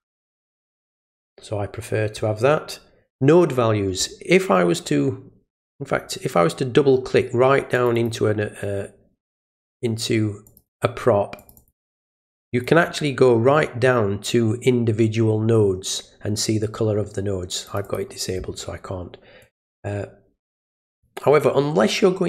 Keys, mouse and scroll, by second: 5.6 click, 7.7 click, 7.9 click, 9.2 middle click, 10.5 click, 10.7 click, 11.4 click, 11.6 click, 12.4 click, 17.7 click, 17.8 click, 19.4 click, 20.9 click.